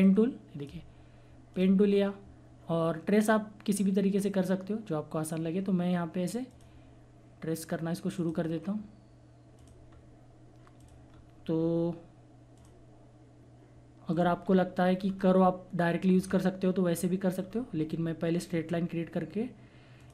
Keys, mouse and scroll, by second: 0.0-1.5 drag, 6.5 click, 9.9 scroll up 1, 10.8 click, 11.0 scroll down 1, 12.5 click, 14.4 scroll down 1, 15.1 scroll up 1, 16.3-16.9 scroll down 1, 19.3-19.6 scroll up 1, 19.9 click.